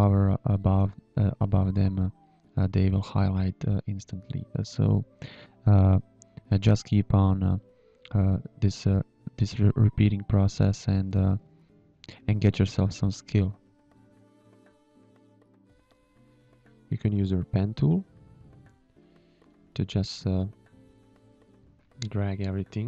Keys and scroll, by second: 0.6-4.3 typing, 5.6-9.0 typing, 8.3 Delete, 11.3 space, 13.7 Delete, 16.9 g, 21.0 space, 21.6 shift+a, 22.4 shift+a.